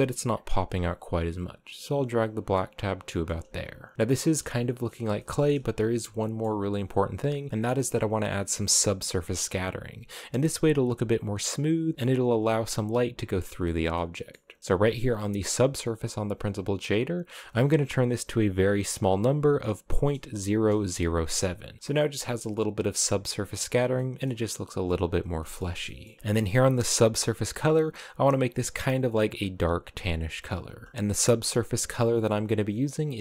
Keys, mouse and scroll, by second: 0.8-2.8 drag, 2.8 shift+middle click, 3.2 a, 3.7 a, 3.9 scroll down 1, 4.0-6.5 shift+middle drag, 6.5-7.5 scroll up 3, 7.5-8.0 scroll down 1, 8.0 click, 8.7 middle click, 8.7 scroll down 1, 9.6-9.9 scroll up 2, 9.8 middle click, 10.5-11.9 scroll up 1, 11.9 middle click, 12.9-13.3 scroll down 1, 13.3 middle click, 13.7-15.4 scroll up 6, 13.8 middle click, 15.4-16.7 scroll up 1, 16.7-19.8 drag, 20.8 middle click, 21.8 scroll down 3, 23.6-26.3 shift+middle drag, 26.3 ctrl+c, 26.6 click, 30.8 ctrl+v, 30.9 click.